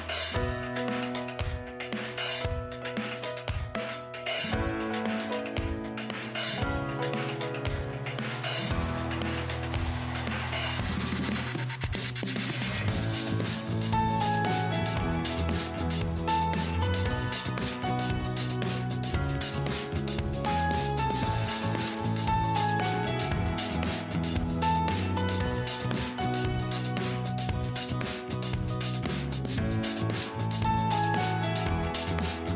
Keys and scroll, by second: 29.2 ctrl+Page_Down.